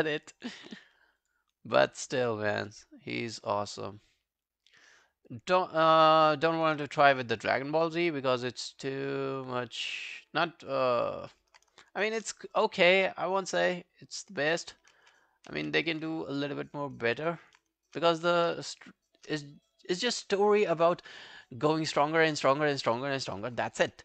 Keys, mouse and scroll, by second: 1.2 shift+click, 1.9 shift+right click, 7.0 shift+scroll down 1, 7.2 alt+middle click, 7.4 alt+right click, 7.7 alt+click, 8.1 alt+middle click, 8.3 alt+right click, 8.7 alt+middle click, 8.9 alt+right click, 10.8 alt+click, 12.7 alt+click, 15.0 ctrl+z, 15.5 ctrl+z, 17.0 alt+click, 18.2 alt+click, 19.0 shift+click, 19.5 alt+click, 19.9 alt+right click, 20.1 alt+click.